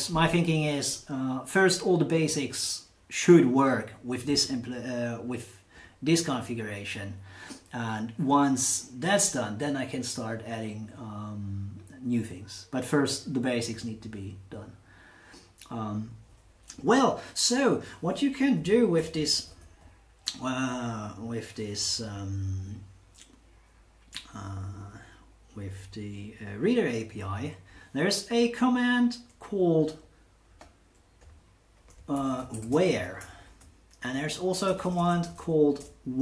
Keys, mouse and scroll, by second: 18.6 Right, 18.9 Down, 19.1 Down, 19.2 Down, 19.4 Down, 19.5 Down, 19.6 Down, 21.8 Down, 22.0 Down, 30.5 click, 31.2 click, 31.9-35.2 typing.